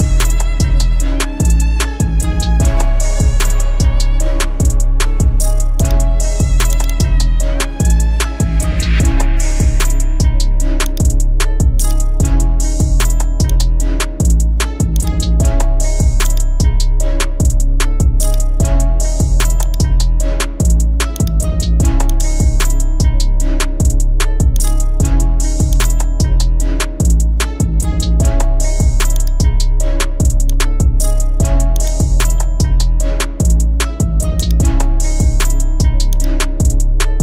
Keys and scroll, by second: 23.3 ctrl+t, 26.9 Return.